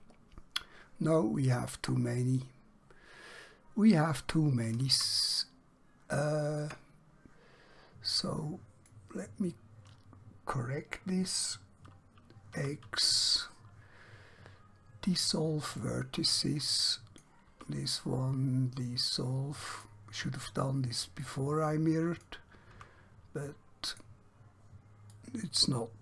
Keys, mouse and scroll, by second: 1.9 scroll up 1, 2.9 scroll down 1, 4.4 scroll up 1, 5.5 shift+middle click, 8.1 click, 12.5 x, 15.7 click, 17.6 x, 19.8 click, 22.9 x, 23.9 click.